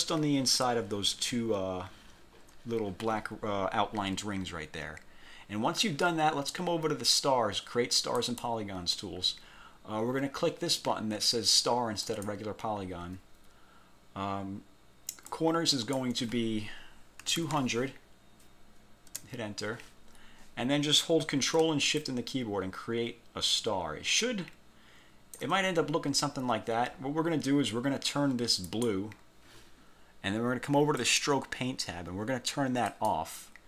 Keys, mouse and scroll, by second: 5.7 scroll down 1, 8.3 click, 12.2 click, 15.4 click, 17.1-18.0 typing, 19.2 Return, 20.1 scroll down 2, 22.1-25.7 ctrl+shift+drag, 28.8 click, 31.1 click, 33.0 click.